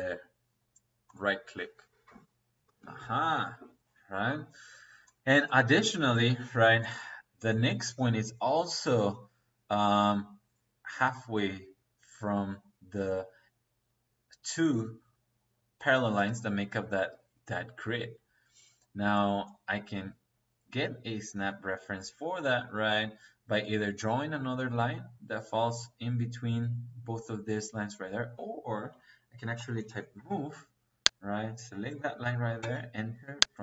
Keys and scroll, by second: 29.4-30.1 typing, 32.5 space.